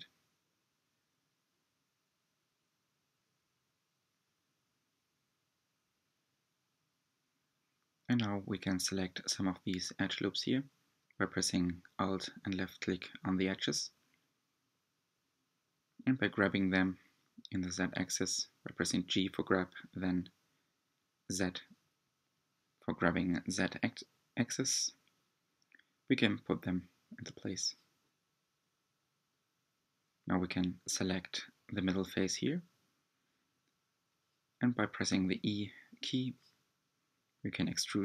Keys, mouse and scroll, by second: 1.0 e, 1.5 click, 2.0 s, 3.7 click, 4.2 s, 4.9 middle click, 6.1 2, 6.7 alt+click, 6.8 middle click, 7.3 alt+shift+click, 7.6 alt+shift+click, 8.2 alt+shift+click, 8.3 middle click, 8.8 g, 10.0 middle click, 10.4 ctrl+click, 10.5 middle click, 11.4 alt+shift+click, 11.7 alt+shift+click, 12.6 alt+shift+click, 12.8 middle click, 13.1 g, 14.8-15.2 scroll up 2, 15.2 3, 15.4 click, 15.6 middle click, 15.8 scroll up 1, 16.1 middle click, 16.5-17.3 scroll down 3, 17.3 shift+click, 17.4 middle click, 17.7 scroll down 1, 17.8 shift+middle click, 18.3 shift+click, 18.5 middle click, 19.5 shift+click, 19.6 middle click, 20.1 shift+click, 20.3 scroll down 2, 20.5 g, 21.2 Tab, 21.4 middle click, 22.1 Tab, 25.0 3, 25.3 click, 26.9 i, 29.7-31.3 middle drag, 31.3 e.